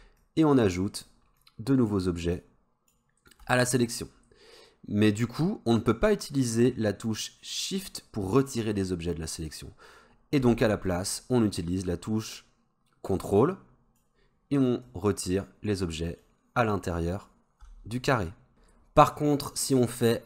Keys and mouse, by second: 0.3-1.1 shift+drag, 1.4-1.9 shift+drag, 2.4 shift+click, 12.3-14.0 ctrl+drag, 14.9 ctrl+click, 16.3-17.2 ctrl+drag.